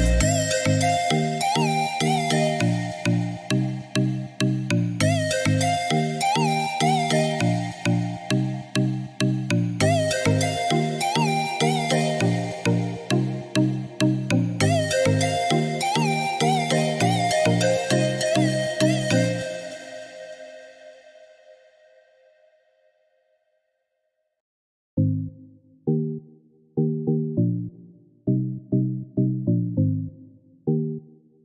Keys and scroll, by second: 7.9 1, 9.4 2, 10.0 0, 10.5 Return.